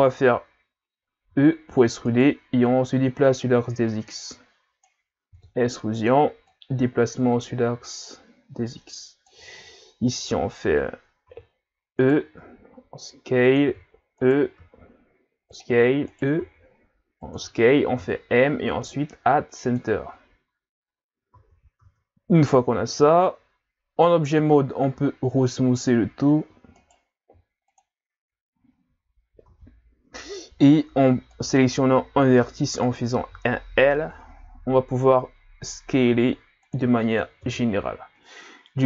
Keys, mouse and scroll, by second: 1.4 e, 2.9 click, 5.4 e, 6.5 click, 11.3 e, 12.4 s, 13.7 e, 14.6 s, 15.8 e, 16.4 s, 17.9 m, 19.9 middle click, 20.5-21.3 scroll up 1, 21.3 Tab, 21.8 Tab, 24.7 w, 26.8 right click, 27.3 w, 28.5-28.9 scroll down 2, 28.9-29.5 scroll up 5, 29.5 Tab, 31.3 right click, 32.1 l, 32.8 right click, 33.3 l, 34.6 s, 37.4 KP_3, 38.4-38.8 scroll down 1.